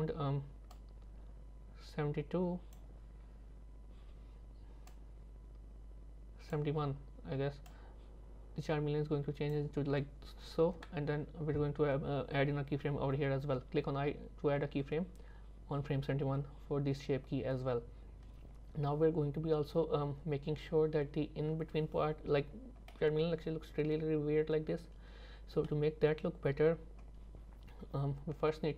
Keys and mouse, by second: 0.8-2.8 drag, 4.9-6.6 drag, 7.8-9.6 drag, 22.9-25.7 middle drag.